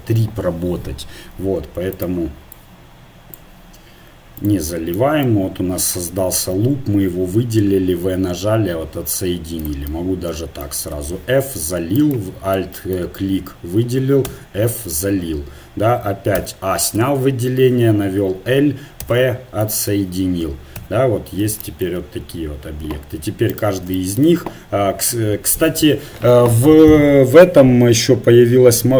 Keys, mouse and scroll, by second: 1.9-3.8 drag, 4.4 click, 4.8-7.5 right drag, 5.8 click, 7.5-9.6 drag, 7.6 v, 10.9 f, 12.0-14.2 drag, 14.3 f, 16.4 a, 17.0 l, 19.0 p, 20.0 Tab, 20.8 KP_1, 21.3-22.3 middle drag, 23.5-25.6 right drag.